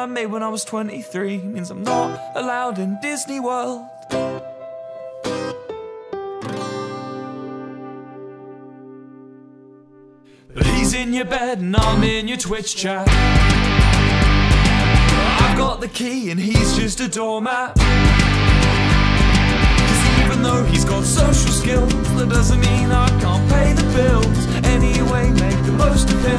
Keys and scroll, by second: 8.6 p.